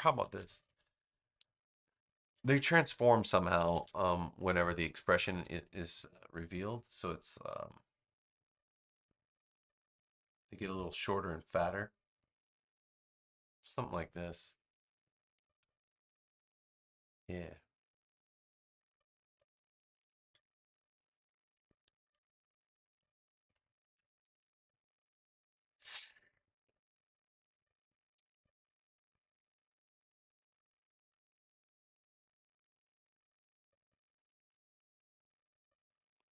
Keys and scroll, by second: 0.1 super+z, 3.5 super+=, 4.4 space, 14.7 space, 19.2 BackSpace, 21.9 super+j.